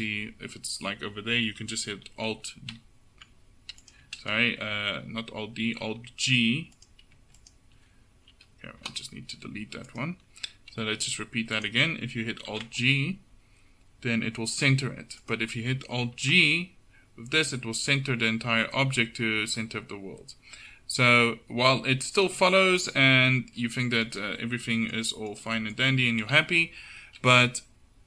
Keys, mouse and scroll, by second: 2.8 alt+d, 4.3 ctrl+shift+z, 5.9 alt+g, 6.8-9.3 drag, 8.4 Delete, 10.0 click, 10.9 g, 11.6 click, 12.6 alt+g, 16.2 alt+g, 24.6 middle click, 26.3 KP_7.